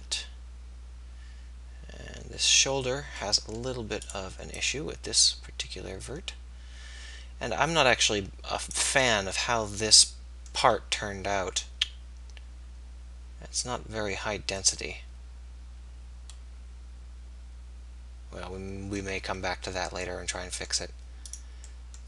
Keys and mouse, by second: 1.9 click, 4.1-6.8 middle drag.